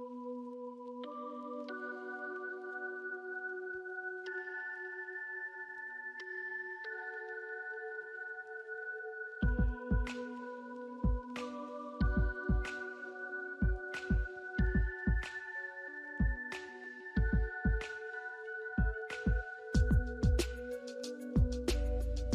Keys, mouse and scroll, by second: 2.7 scroll down 1, 2.9 alt+middle click, 3.9 alt+scroll up 1, 4.3 alt+middle click, 10.2 alt+middle click, 11.8 right click, 18.7 alt+middle click, 19.3 scroll down 1, 20.0 middle click, 20.6 scroll up 1, 21.3 alt+click.